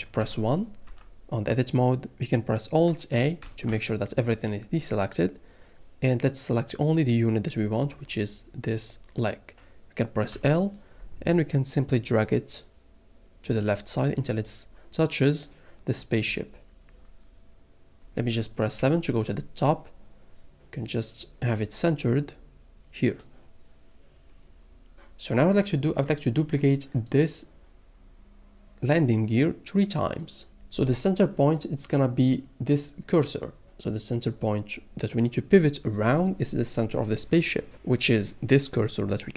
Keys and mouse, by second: 0.2 click, 0.2 KP_1, 0.8 Tab, 3.4 alt+a, 10.3 l, 11.3 click, 18.8 KP_7.